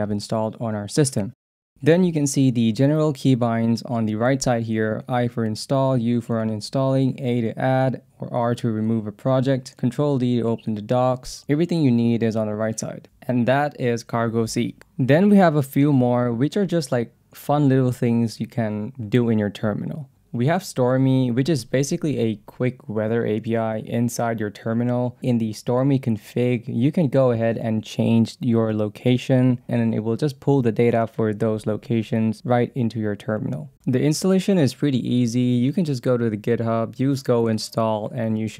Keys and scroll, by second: 1.0 Down, 12.4 Down, 13.3 Up, 14.2 Down, 19.9-21.2 typing, 21.8 Return, 23.6 Return, 24.9-26.4 typing, 27.6 Return, 28.4-29.6 typing, 33.3-34.2 typing, 34.6 Return, 38.3 ctrl+c.